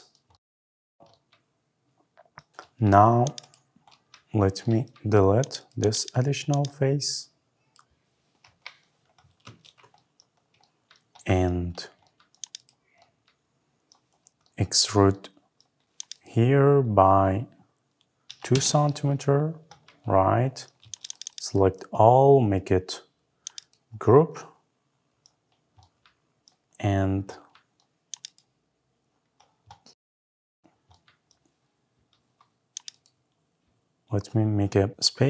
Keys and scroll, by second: 8.2 Delete, 8.8 Delete, 9.3 Escape, 18.3 Return.